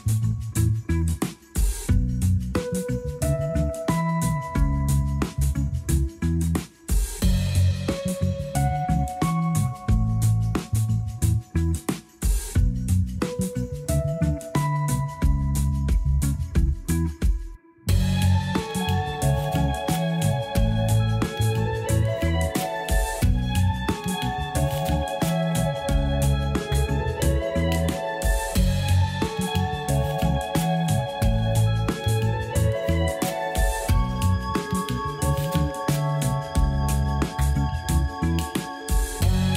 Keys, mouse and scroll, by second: 0.2 r, 1.4 g, 2.9 scroll up 1, 3.3-3.8 shift+middle drag, 3.8-4.8 scroll up 1, 4.8 s, 6.3 scroll down 2, 6.6 g, 7.9-8.3 scroll down 1, 8.3 click, 8.8 r, 9.8-10.2 scroll down 3, 10.2 shift+d, 10.6 g, 11.8-12.1 scroll up 3, 12.9-13.7 shift+middle drag, 13.7-14.7 scroll up 1, 14.7 r, 16.3 r, 17.7 scroll up 1, 18.0 g, 19.3-19.8 scroll down 5, 19.8 a, 20.0 a, 20.8 click, 21.8 click, 23.6 click, 24.6 s, 26.8-27.2 scroll up 1, 27.2 r, 29.1 scroll up 1, 29.4 g, 30.4-30.8 scroll up 4, 30.8 shift+middle click, 31.3 scroll up 1, 31.7 g, 32.7-33.4 scroll down 12, 33.4 a, 33.6 a, 34.2 shift+middle click, 34.7-35.1 scroll up 2, 35.1 click, 35.7 g, 37.4-39.3 scroll down 14, 38.2 a, 38.4 a, 39.3-39.5 shift+middle drag.